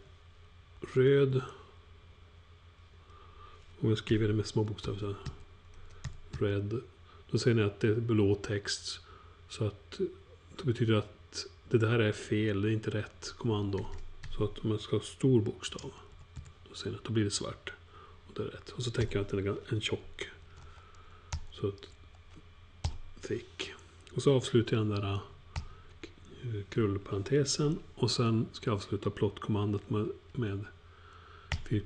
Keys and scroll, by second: 0.5-1.2 typing, 3.3 typing, 4.8-6.3 typing, 15.5-16.8 typing, 18.7-21.7 typing, 22.8 typing, 25.5 alt+shift+0, 31.4 alt+9.